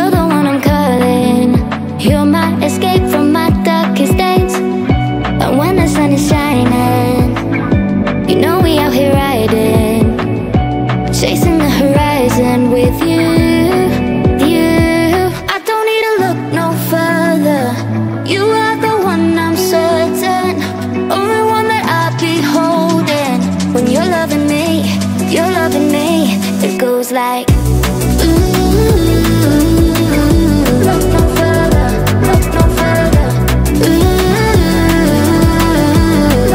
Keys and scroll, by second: 20.2 Right.